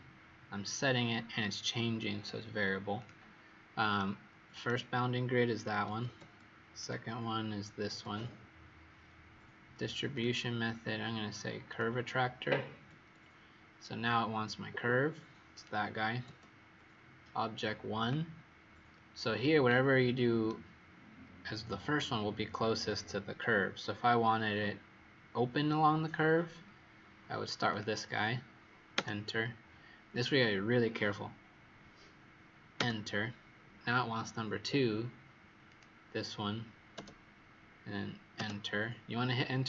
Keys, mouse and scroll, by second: 3.9 right click, 5.5 click, 6.1 click, 6.7 click, 10.1 click, 15.4 click, 19.8-20.4 scroll down 1, 20.4 right click, 27.6 click, 35.6 click.